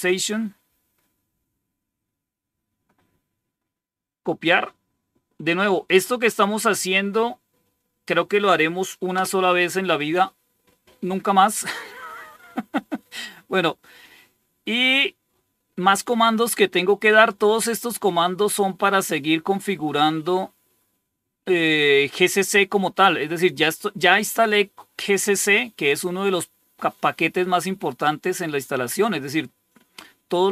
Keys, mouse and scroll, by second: 0.7-2.7 drag, 3.3 right click, 4.1 click, 6.2 right click, 7.5 click, 9.0 Return, 12.5 scroll down 1.